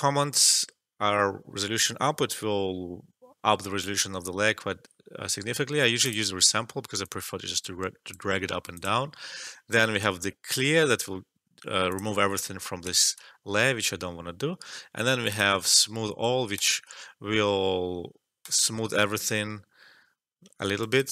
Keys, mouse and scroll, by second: 6.0-8.7 drag, 11.9 click, 13.0 ctrl+z, 14.9 alt+middle click, 15.2 alt+click, 20.7 alt+right click, 20.9 alt+click.